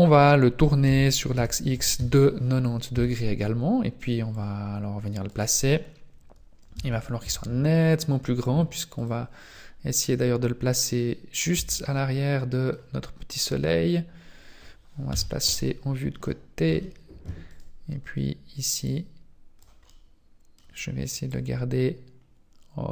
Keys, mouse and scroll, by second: 0.8 r, 2.9 Tab, 4.3 click, 6.7 Tab, 7.2 s, 9.5 middle click, 11.5 Tab, 11.9 middle click, 13.3 right click, 15.2 KP_3, 16.2 middle click, 16.9 shift+middle click, 17.5 right click, 17.9-18.3 scroll up 2, 18.8 click, 19.9 middle click, 21.3 click.